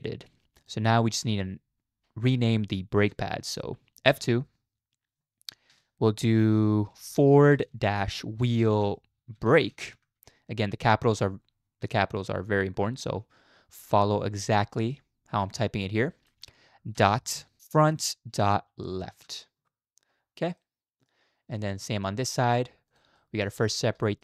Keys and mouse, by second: 0.6 click, 1.1 click, 4.1 F2, 8.7 e, 20.6-21.1 middle drag, 21.6 shift+middle click, 22.3 middle click, 22.9 click, 23.2 shift+middle drag, 24.1 shift+middle click.